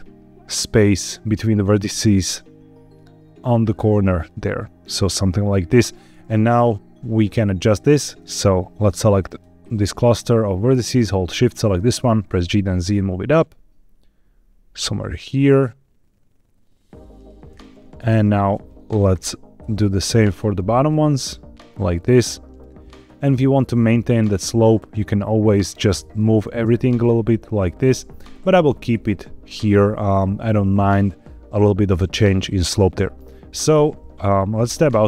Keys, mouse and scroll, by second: 5.6 click, 8.1-9.3 drag, 11.0 shift+click, 12.0 g, 12.3 z, 17.4 click, 18.0 click, 19.0 shift+click, 19.9 g, 20.0 z, 22.8 click, 25.6 click, 26.4 g, 26.6 x, 27.8 Escape, 34.6 Tab.